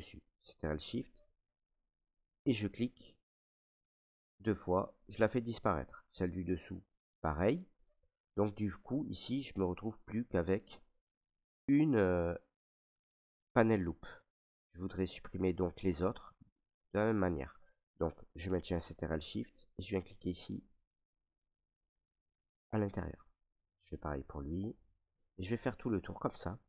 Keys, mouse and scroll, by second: 0.7 click, 2.3 click, 3.1 click, 6.6 click, 8.5 ctrl+right click, 13.8 alt+right click, 15.4 right click, 16.1 alt+right click, 20.3 click, 21.3 ctrl+z, 22.6 click, 23.8 click, 24.8 ctrl+right click, 25.5 alt+right click.